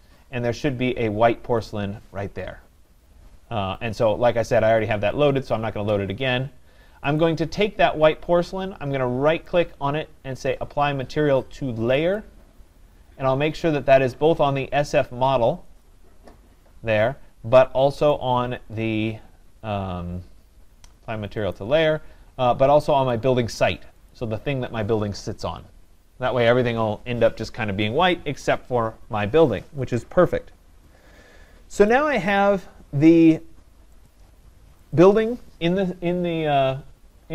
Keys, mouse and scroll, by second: 1.7 click, 5.5 click, 7.2 click, 9.5 right click, 12.2 click, 15.8 click, 18.1 right click, 21.5 click, 23.2 click, 24.1 click, 32.0 click, 34.1 click, 35.1 click.